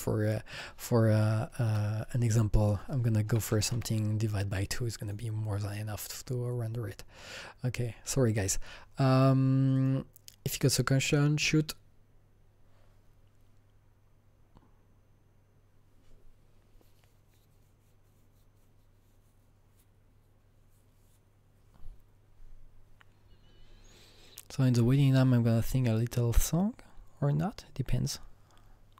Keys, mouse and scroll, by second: 0.5 KP_Divide, 0.5 click, 1.3 KP_2, 1.7 Return, 2.6 click, 2.9 Return, 2.9 click, 2.9 KP_2, 3.3 KP_Divide, 3.5 KP_2, 3.7 Return, 5.0 click, 6.0 click, 9.8 click, 9.8 click, 11.1 click, 11.3 click.